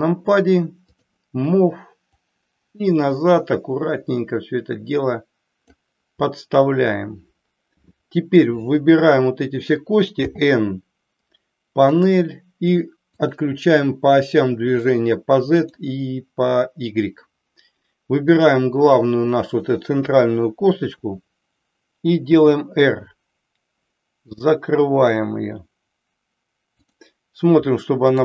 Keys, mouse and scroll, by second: 0.9 click, 2.1-5.7 drag, 7.9-8.5 middle drag, 10.1 n, 12.0 click, 13.2 click, 15.6 click, 20.9 KP_3, 22.4 r, 26.8 click, 28.1 click.